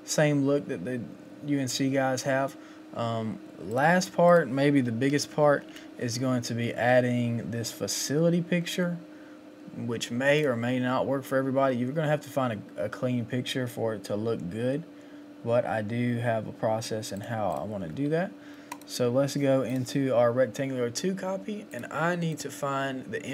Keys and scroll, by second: 5.1 Up.